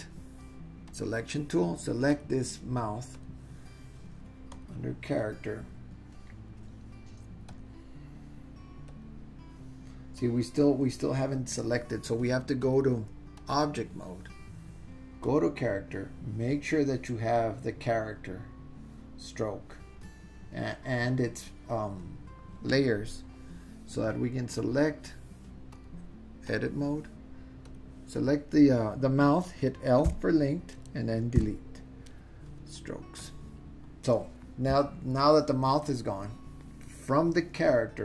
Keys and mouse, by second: 0.9 click, 2.1 click, 3.2 click, 4.6 click, 8.9 click, 12.7-13.6 drag, 15.2 click, 25.8-26.6 drag, 27.7 click, 30.1 l, 31.4 Delete.